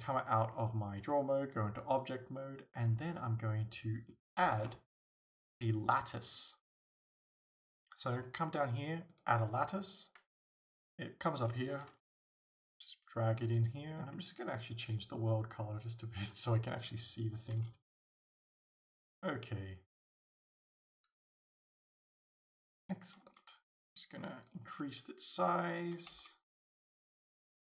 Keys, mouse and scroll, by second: 0.1 click, 0.6-13.6 drag, 4.5 shift+a, 12.0 g, 14.9 click, 17.9 g, 21.1 click, 21.4 Tab, 22.9 s, 24.5 click, 24.7 g, 25.8 click, 26.0 s, 27.0 click, 27.1 g.